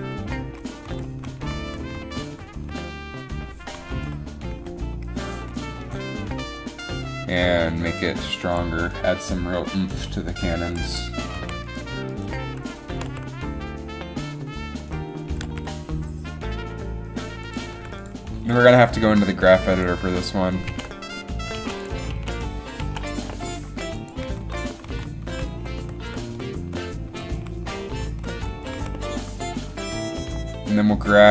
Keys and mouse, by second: 0.0 Right, 0.5 Left, 1.0 Right, 1.3 Right, 1.6 Right, 1.9 Right, 2.1 Right, 2.2 Right, 2.4 Right, 2.8 Right, 4.1 Left, 4.7 Left, 7.0 g, 11.5 a, 13.0 r, 15.5 r, 18.2 i, 20.8 alt+a, 21.7 alt+a, 22.3 alt+a, 23.0 alt+a, 24.4 Right, 24.6 Right, 25.0 Left, 25.4 Right, 25.7 Right, 25.9 Right, 26.2 Right, 26.4 Right, 26.8 Right, 27.2 Right, 27.5 Right, 27.8 Right, 28.0 Right, 28.3 Right, 28.5 Right, 28.8 Right, 29.0 Right.